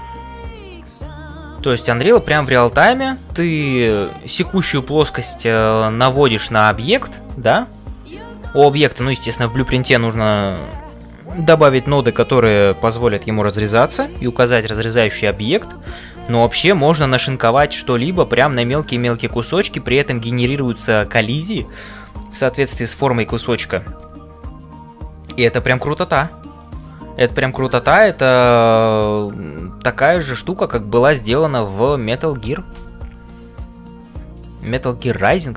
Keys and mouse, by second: 0.0-35.5 typing.